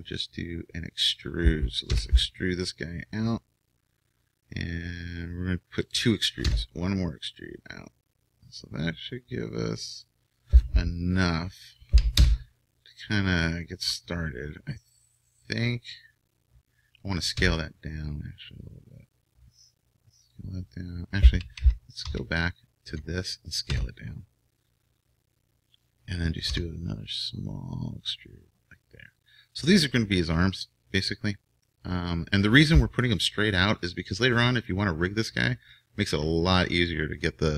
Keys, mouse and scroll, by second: 1.9 e, 6.5 e, 12.2 KP_1, 17.3 s, 21.6 ctrl+z, 22.0 ctrl+z, 23.7 s, 26.4 e.